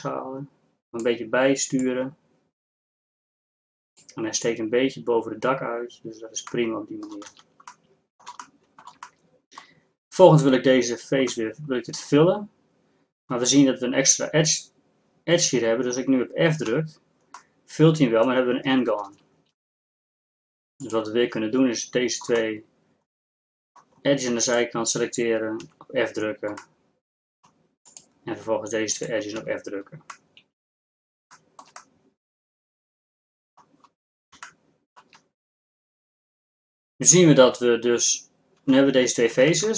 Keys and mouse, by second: 6.5 click, 6.7 middle click, 7.0 middle click, 7.5 z, 16.8 f, 19.2 ctrl+z, 24.2 middle click, 24.5-26.6 right drag, 25.7 f, 26.6 middle click, 27.5 middle click, 27.9-29.4 right drag, 29.5 right click, 29.5 f, 30.6-32.7 middle drag, 39.5 ctrl+Tab.